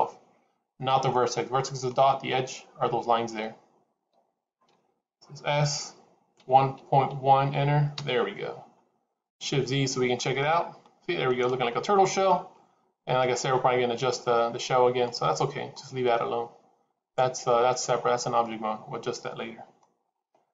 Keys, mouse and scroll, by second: 5.2 s, 9.8 shift+z, 10.2 middle click, 12.3 scroll down 1, 13.0 middle click, 13.0 scroll down 3, 17.9 scroll up 2, 18.3 middle click, 19.7-20.5 scroll up 1.